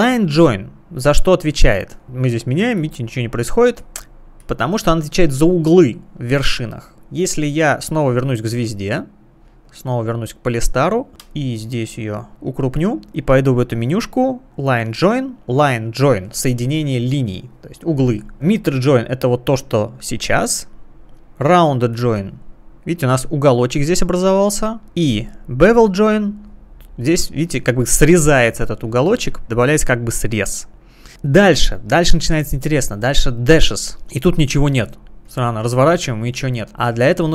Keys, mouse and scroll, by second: 2.0 click, 2.8 click, 3.8 click, 4.4 click, 9.7 click, 11.3 space, 11.7 click, 11.8 space, 12.7 space, 13.4 space, 14.5 click, 21.0 click, 21.9 click, 24.9 click, 25.7 click, 33.7 click, 34.8 click, 35.3 click, 35.8 click, 35.9 click, 36.2 click.